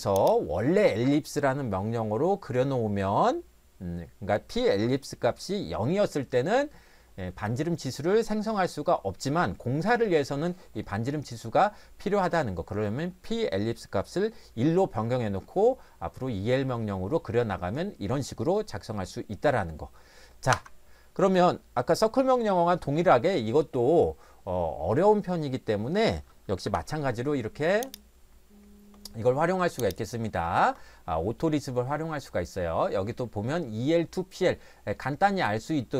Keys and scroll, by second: 20.5 Escape.